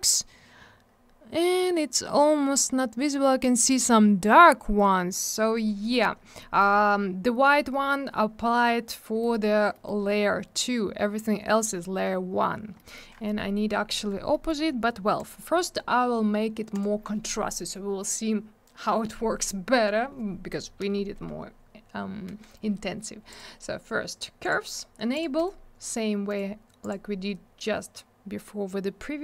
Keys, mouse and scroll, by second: 1.4-2.0 scroll down 1, 5.2 middle click, 5.3 middle click, 5.4-5.8 scroll up 1, 6.3 middle click, 6.7-7.8 scroll down 1, 9.2 middle click, 9.3 middle click, 9.7 middle click, 9.8 middle click, 11.3-11.8 scroll down 1, 12.7 middle click, 12.9 middle click, 14.3 middle click, 14.4 middle click, 15.1 click, 15.2 click, 15.3 click, 15.4 double click, 16.7 click, 16.8 click, 23.3 click, 24.4 click, 25.1 click, 25.3 right click, 26.3 right click, 26.8 click.